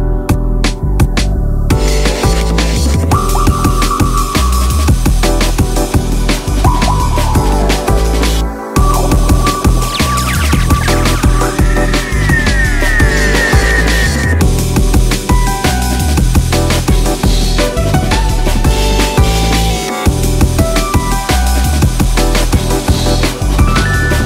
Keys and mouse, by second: 2.0 space, 2.9 click, 3.3 shift+click, 6.5-13.9 drag, 14.5-16.6 drag, 18.9-24.2 alt+drag.